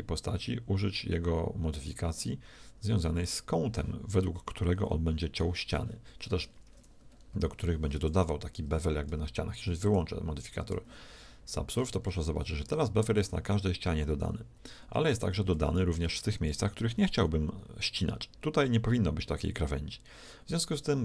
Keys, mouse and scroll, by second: 1.8-5.1 drag, 7.2 middle click, 8.3-9.9 middle drag, 9.9-11.6 drag, 11.6-17.6 middle drag.